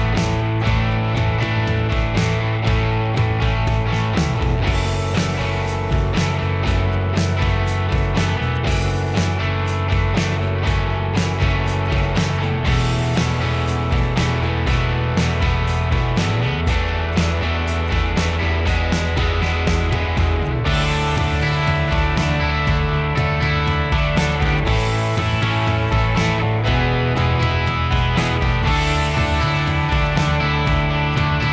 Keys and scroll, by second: 13.3 b.